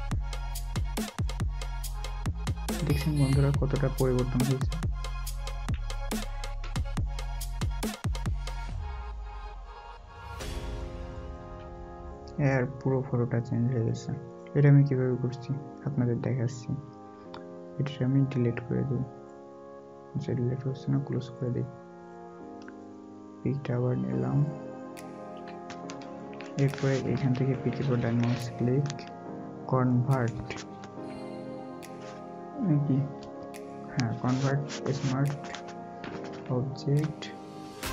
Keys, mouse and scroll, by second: 2.6 alt+scroll up 1, 3.5 alt+scroll down 1, 5.1-6.1 scroll up 2, 6.4 alt+scroll, 6.4-7.0 alt+scroll down 1, 7.0 scroll up 1, 11.8 scroll, 12.0 alt+scroll down 1, 23.1 double click, 25.1 double click, 28.0 double click.